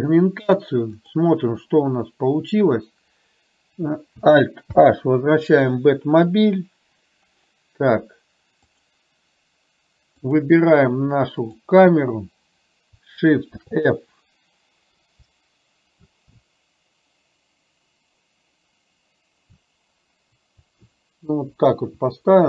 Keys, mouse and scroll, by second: 4.8 alt+h, 8.8 click, 10.4 click, 13.6 shift+f.